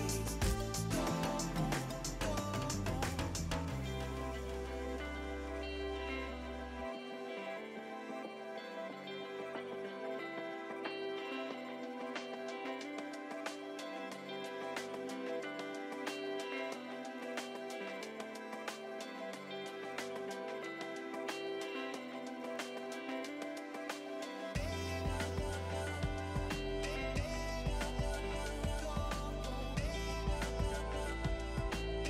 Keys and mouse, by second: 0.3 ctrl+x, 0.6 click, 1.1 4, 1.5 click, 2.5 click, 2.8 ctrl+click, 3.2 ctrl+shift+x, 3.5 click, 4.0 4, 4.6 click, 7.5 click, 8.8 click, 10.2 Delete, 10.5 click, 12.1 Delete, 12.2 click, 12.3 Delete, 12.4 click, 12.5 Delete, 12.6 click, 16.2 Delete, 16.4 click, 20.4 Pause, 20.9 click, 22.8 click, 25.2 shift+click, 31.4 Pause.